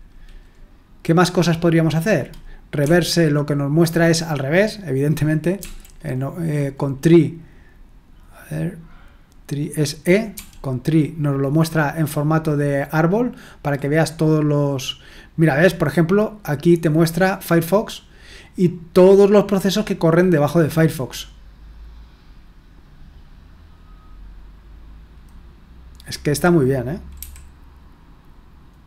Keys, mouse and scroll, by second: 2.8 r, 5.6 r, 10.3 e, 27.2 t.